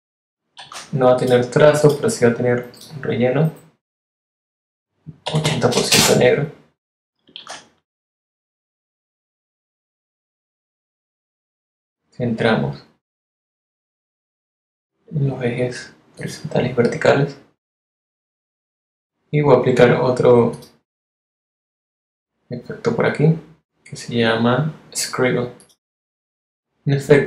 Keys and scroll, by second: 0.5 shift+x, 5.2 8, 5.9 Return, 7.3 shift+x.